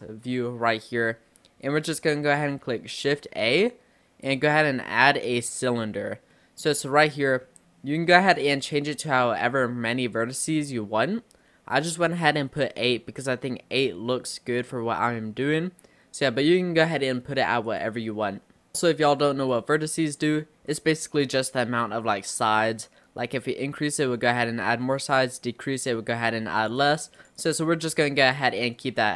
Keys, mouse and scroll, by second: 1.5-2.0 scroll up 1, 3.4 shift+a, 6.4-6.7 middle drag, 6.7-7.2 scroll up 4, 7.2-8.3 middle drag, 8.3-11.4 drag, 12.5-16.7 middle drag, 17.7-18.8 drag, 18.8-19.5 middle drag, 19.5-20.2 drag, 20.2-20.5 scroll up 3, 20.5-21.2 middle drag, 21.2-22.0 scroll up 2, 22.7-25.7 drag, 26.6-29.1 drag.